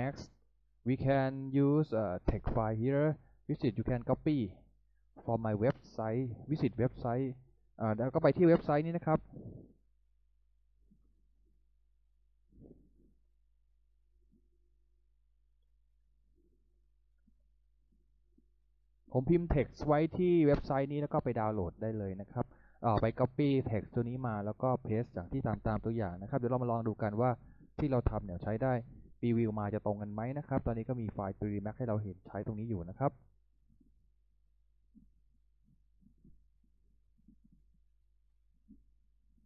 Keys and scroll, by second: 7.2 Return, 8.8-19.2 typing.